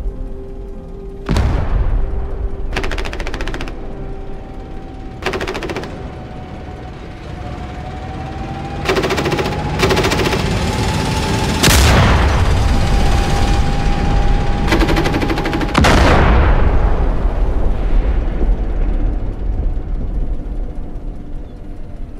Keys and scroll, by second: 4.2 d, 6.7 q, 9.5 a, 17.1 e, 17.7 a, 21.6 s.